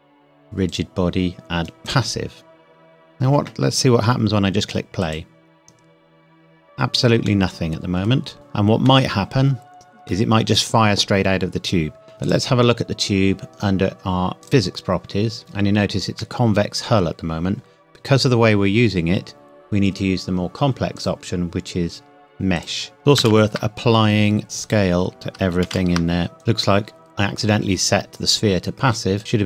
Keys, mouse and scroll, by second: 2.7 scroll down 1, 5.0 click, 7.3 middle click, 8.3 click, 8.9 middle click, 12.1 click, 14.4 click, 16.2 middle click, 17.6-19.2 scroll up 1, 21.0 click, 23.0 Tab, 23.2 ctrl+a, 24.4 click, 25.7 ctrl+a, 26.4 click, 29.2 click.